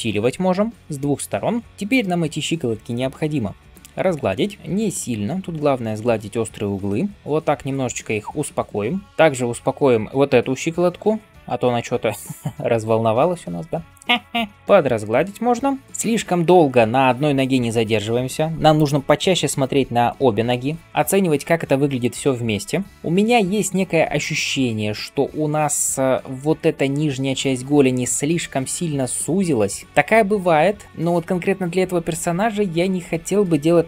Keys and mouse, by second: 3.0 ], 3.1 ], 20.0 alt+b.